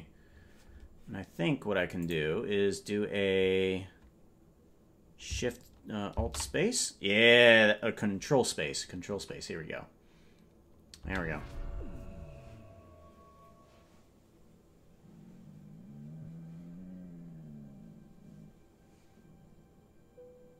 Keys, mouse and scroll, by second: 2.0 ctrl+s, 2.0 click, 6.2 ctrl+space, 11.0 space.